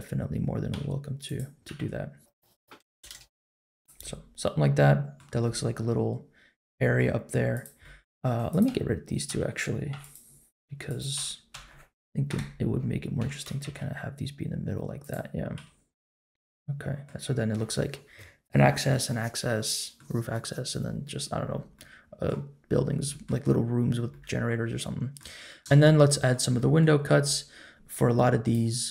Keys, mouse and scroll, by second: 0.7 r, 1.6 r, 2.6 click, 2.8 l, 3.0 g, 4.0-5.1 middle drag, 5.4-6.9 middle drag, 7.5 click, 7.8 middle click, 8.5 click, 8.6 l, 9.3 l, 9.9 x, 10.8 click, 11.1 l, 11.5 l, 12.3 KP_7, 13.2 g, 15.5 s, 16.3 middle click, 17.7 scroll up 1, 19.6 middle click, 21.7 middle click, 22.7-23.2 scroll down 2, 23.0 middle click, 23.7-24.1 scroll down 2, 24.1-25.1 middle drag, 25.6 middle click, 25.8 middle click, 26.5 middle click, 27.2 middle click.